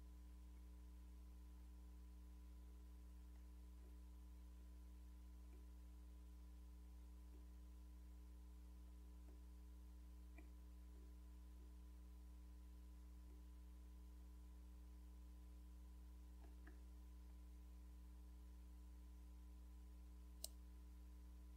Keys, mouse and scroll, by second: 2.6-5.6 scroll down 10, 7.3-8.3 scroll down 4, 9.3-12.6 scroll down 9, 13.4-14.2 scroll down 2, 20.4-21.5 drag.